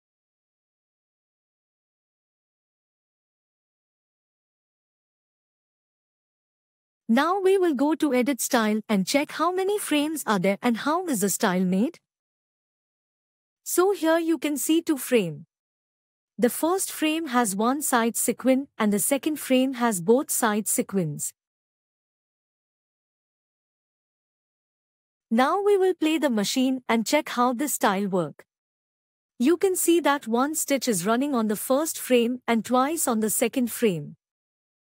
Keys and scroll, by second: 1.3 F6.